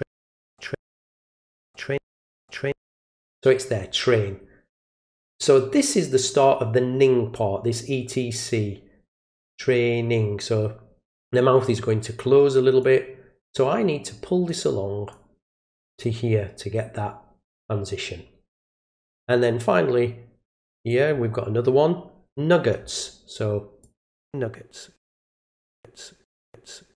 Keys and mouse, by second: 1.2-1.6 drag, 12.8-14.5 drag, 15.1 click, 19.0-20.9 drag, 23.8 click, 25.3 click.